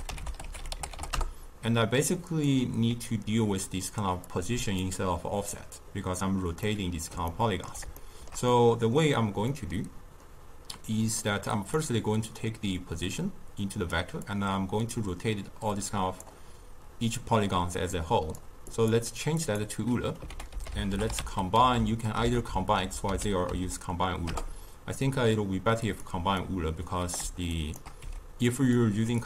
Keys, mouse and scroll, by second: 4.2 click, 6.5-11.7 middle drag, 11.7 click, 14.2 click, 17.9-20.2 drag, 20.2 ctrl+a, 21.6 Down, 23.0 Up, 26.3 click, 27.5 shift+right click, 27.9 g, 29.1 click.